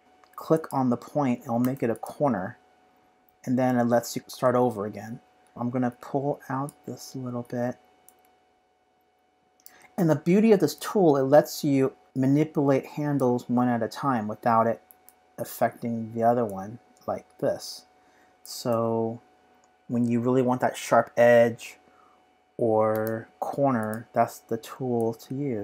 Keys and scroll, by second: 14.9 super+z, 18.5 super+z, 22.9 v.